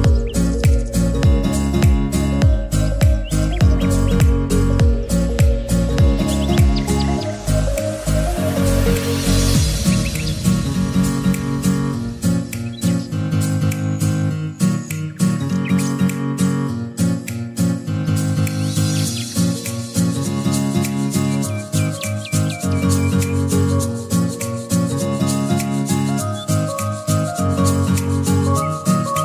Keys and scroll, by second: 0.0-1.0 typing, 3.8-4.9 typing, 6.5-8.0 typing.